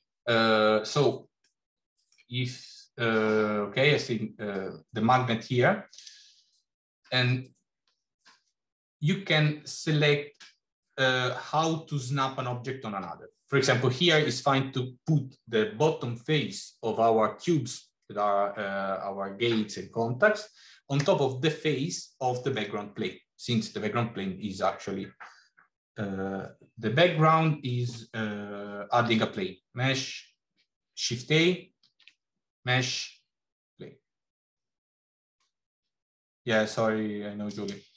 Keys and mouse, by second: 1.2 middle click, 5.8-27.1 drag, 27.6 middle click, 28.8 shift+a, 31.7 shift+a.